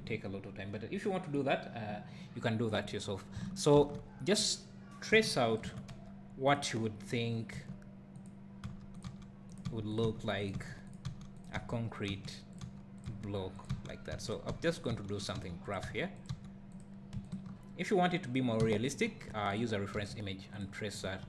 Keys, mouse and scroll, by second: 3.5-4.5 shift+right drag, 4.5 shift+a, 5.2 g, 5.6 click, 5.7 Tab, 5.9 1, 6.6 click, 7.6 g, 8.2 click, 8.7 e, 9.0 click, 9.7 e, 10.0 click, 10.1 e, 10.9 click, 11.1 e, 11.4 click, 11.6 e, 12.1 click, 12.7 e, 13.1 click, 14.5 e, 15.7 click, 15.9 e, 16.3 click, 16.7 e, 16.8 click, 17.3 shift+click, 18.6 f, 19.3 2, 19.6 click, 20.6 x, 21.1 a.